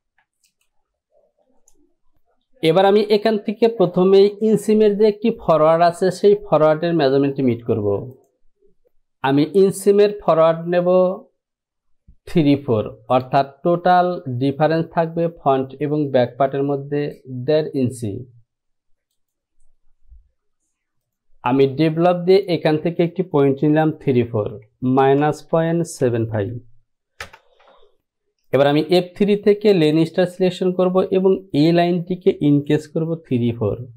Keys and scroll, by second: 25.1 KP_Subtract, 25.6 KP_Decimal, 26.1 KP_7, 27.3 Return.